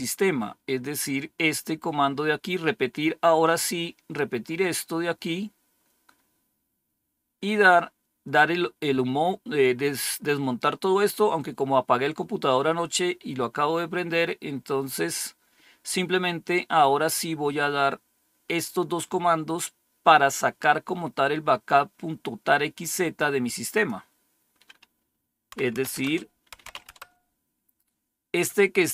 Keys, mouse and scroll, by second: 1.8-2.9 scroll up 1, 2.9-4.3 scroll up 1, 4.3-5.5 scroll up 1, 5.5-10.6 scroll down 2, 14.5-15.3 scroll down 2, 15.3-23.1 scroll down 1, 23.6-24.9 drag, 25.4-26.9 typing, 25.9 Return.